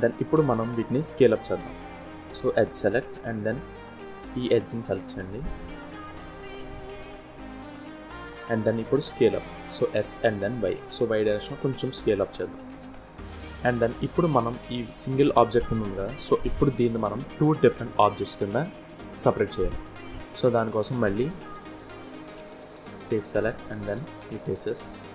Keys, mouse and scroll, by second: 0.8 click, 2.1 2, 2.7 click, 3.5 shift+click, 4.6 click, 5.3 shift+super+click, 7.1 shift+click, 9.4 s, 12.5 scroll down 2, 12.8 middle click, 13.4 scroll down 2, 14.5 click, 15.5-15.9 scroll up 2, 17.1 middle click, 18.8 scroll up 1, 19.2 shift+middle click, 20.0 middle click, 22.5 click, 23.7 click, 24.6 middle click.